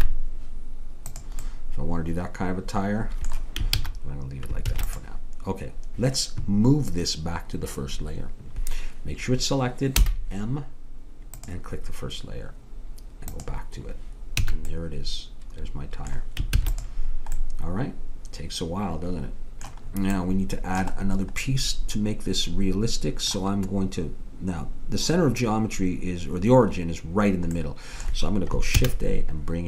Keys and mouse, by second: 1.5 click, 3.7 ctrl+z, 4.7 ctrl+s, 10.1 m, 13.4-15.2 drag, 14.4 a, 16.6 ctrl+s, 20.2-22.6 middle drag, 28.8 shift+a.